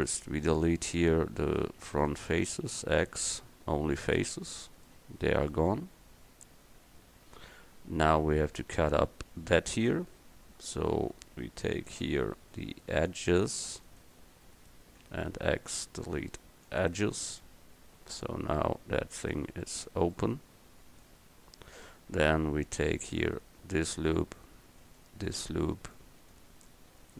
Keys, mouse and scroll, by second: 0.5-2.8 right drag, 2.8 x, 15.3 x.